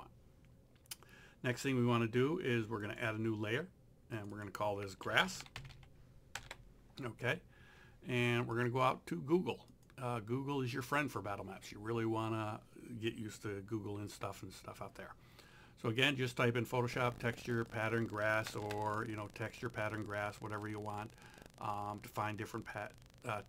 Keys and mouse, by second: 2.9 click, 4.8-6.1 typing, 6.4 KP_Enter, 8.5 click, 16.0 click, 17.7 click, 18.5 KP_Enter.